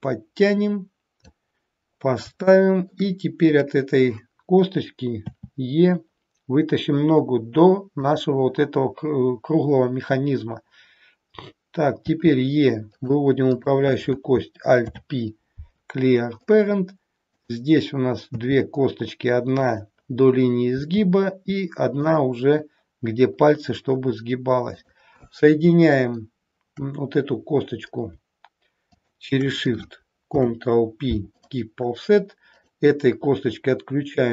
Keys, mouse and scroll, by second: 2.0 scroll up 3, 2.5 shift+middle click, 3.5 click, 5.2 e, 12.1 e, 13.5 click, 14.8 alt+p, 17.3 click, 18.3 e, 20.8 e, 24.6 click, 27.5-27.8 scroll up 1, 28.8 shift+click, 30.2 ctrl+p, 32.6 click.